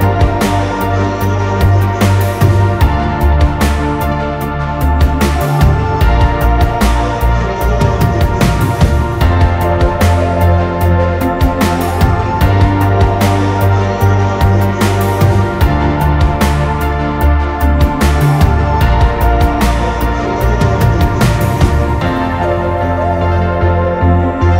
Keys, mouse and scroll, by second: 0.0-3.1 typing, 7.7-9.5 typing.